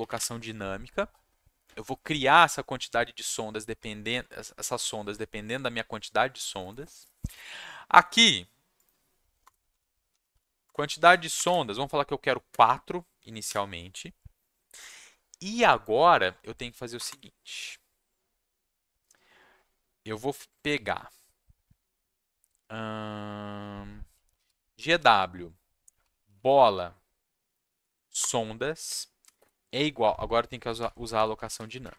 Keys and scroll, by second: 9.4 Return, 9.4-11.3 typing, 12.5 4, 13.4 ,, 16.9 Return, 17.0 Return, 24.0-26.8 typing, 27.5 Down, 27.6 Down, 27.7 Down, 27.8 Down, 28.0 Down, 28.2 Return, 28.8 space, 29.2 =, 29.4 space, 30.5-31.9 typing.